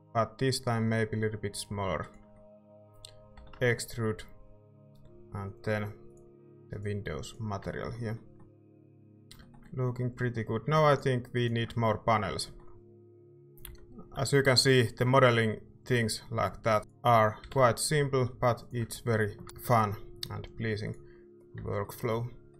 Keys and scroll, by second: 3.4 e, 7.6 Tab, 8.5 a, 13.6 i, 14.1 i, 17.4 e, 21.6 ctrl+Tab.